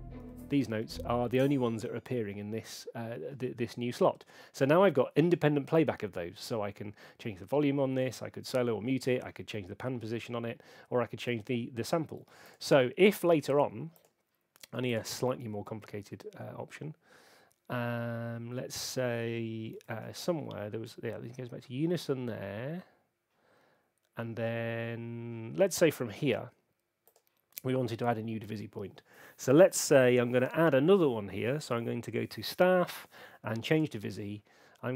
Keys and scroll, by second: 0.7 space.